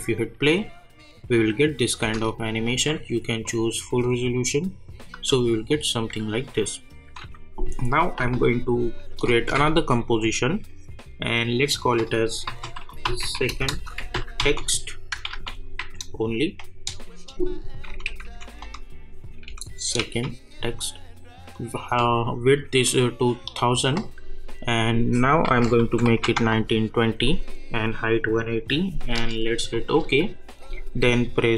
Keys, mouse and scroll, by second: 2.0 space, 2.6 click, 3.8 space, 5.7 click, 9.5 ctrl+n, 12.2-15.8 typing, 17.9 Left, 20.0 d, 21.5 click, 27.2 click, 29.7 click.